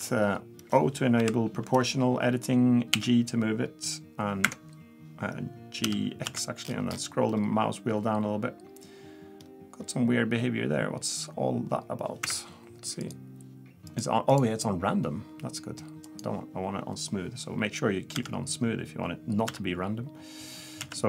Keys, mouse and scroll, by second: 1.2 o, 2.9 g, 5.8 g, 13.0 click, 13.9 click, 18.1 g.